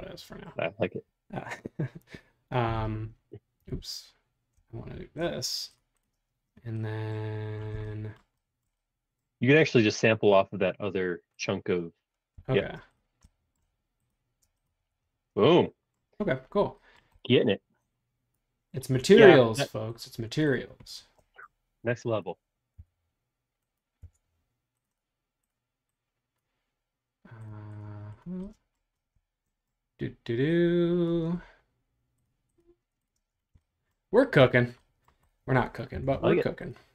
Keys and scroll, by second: 2.6 super+g, 3.7 super+z, 4.8 shift+g, 12.3 b, 14.4 space, 14.8 Escape, 22.9 BackSpace, 24.0 BackSpace, 33.2 space, 36.0 BackSpace.